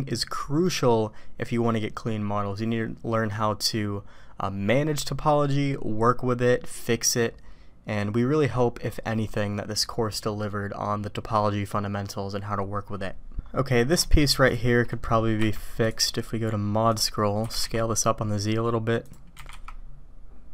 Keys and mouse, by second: 13.8 ctrl+s, 13.8 click, 14.4 click, 14.8 middle click, 17.5 s, 19.4 g.